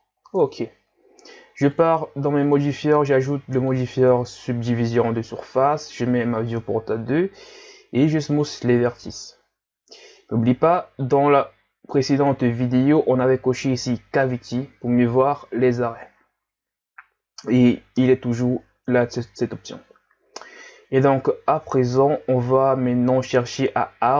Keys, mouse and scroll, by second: 0.0-0.4 scroll down 4, 0.4 Tab, 1.7 click, 2.4-5.5 drag, 5.7-7.5 drag, 7.5 w, 12.1-15.1 drag, 17.1-17.9 scroll up 1, 18.1-18.7 scroll up 1, 18.7-19.2 scroll up 1, 21.9 scroll up 2, 21.9 scroll down 2, 22.6-23.0 scroll up 2.